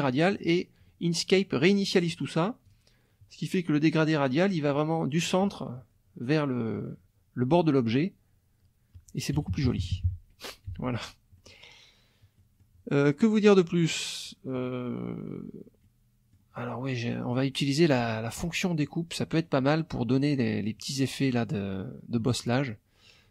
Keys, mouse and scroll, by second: 2.7 click, 9.4 KP_Subtract, 11.0 F1, 11.0 click, 11.3 middle click, 12.4 middle click, 13.3 middle click, 13.8 middle click, 15.8 middle click, 16.7 middle click.